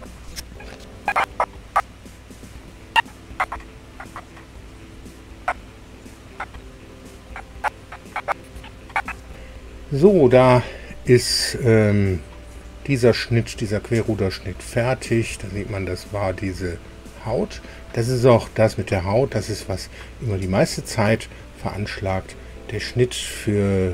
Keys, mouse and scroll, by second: 9.3 super+r, 15.2-19.9 drag.